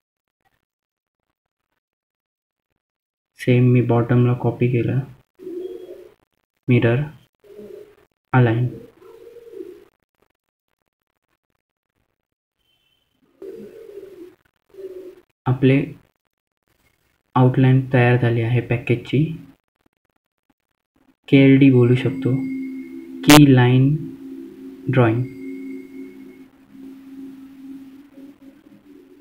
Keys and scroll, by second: 10.7 F3, 11.1 F3, 11.5 F2, 13.9 F3, 14.5 F2, 17.1 F3, 22.3 F2.